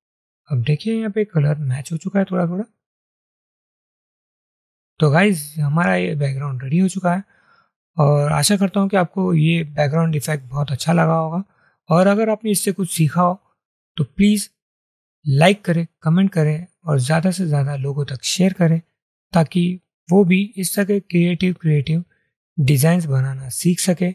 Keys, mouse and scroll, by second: 3.6 ctrl+0.